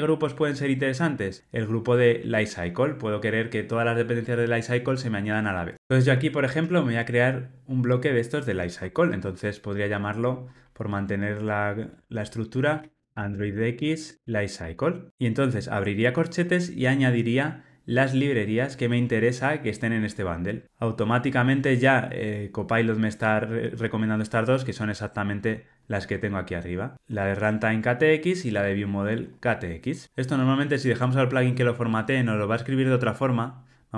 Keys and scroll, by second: 23.1 Tab.